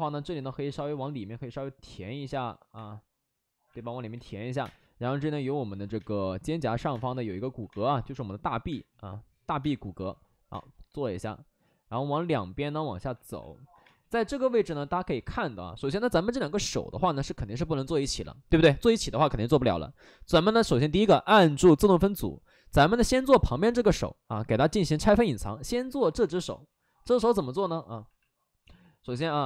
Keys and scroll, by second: 0.7 ctrl+z, 0.9 ctrl+z, 2.7 3, 4.1 2, 4.5 1, 4.5 space, 5.7 ctrl+z, 5.9-10.4 typing, 12.9 space, 13.8 space, 17.6 alt+s, 17.9 alt+s, 20.4 shift+f, 25.3 alt+s, 25.7 alt+s, 26.1 shift+f, 26.9 w, 29.3 x.